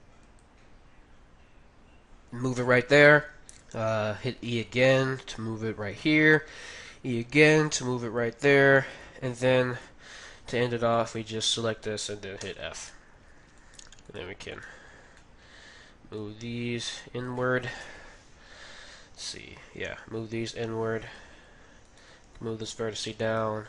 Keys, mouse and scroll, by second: 4.4 e, 6.6 e, 8.6 e, 8.8-10.6 middle drag, 10.9-12.7 right drag, 12.3 f, 12.9-14.1 middle drag, 13.6-15.2 drag, 14.1-16.1 right drag, 14.5 middle click, 15.2-16.5 middle drag, 16.2 click, 16.8-18.2 drag, 16.8 middle click, 17.8 KP_1, 19.5 g, 21.8-23.6 right drag, 22.0 g, 23.4 g.